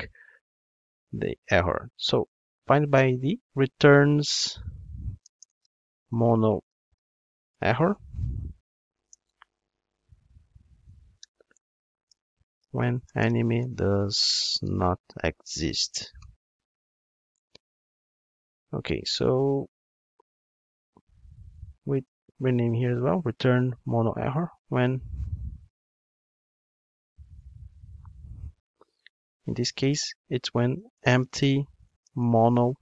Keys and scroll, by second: 10.5 alt+shift+Right.